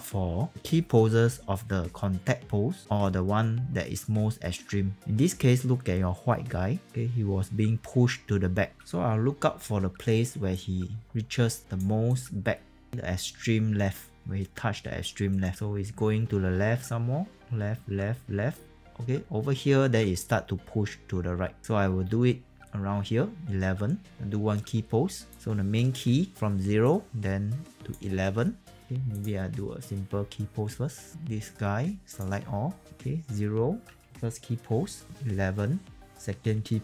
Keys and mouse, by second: 29.1 click, 32.0 click, 32.8 s.